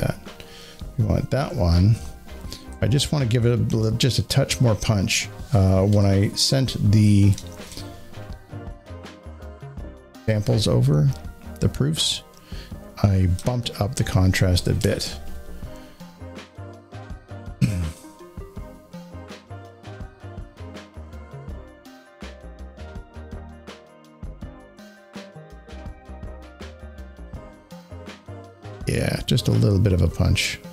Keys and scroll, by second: 1.4 Down, 4.4 Up, 11.8 Up.